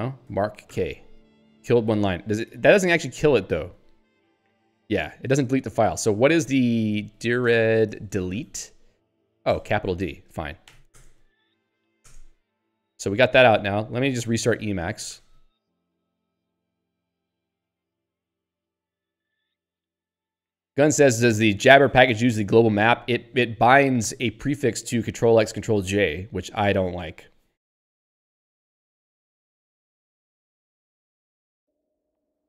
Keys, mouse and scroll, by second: 0.4 m, 0.7 k, 3.8 g, 6.2 Up, 7.0-10.7 typing, 9.7 ctrl+g, 10.9 Return, 11.9 l, 12.1 Return, 12.7 q, 13.8 ctrl+g, 15.2 e, 16.1 ctrl+g, 16.5 e.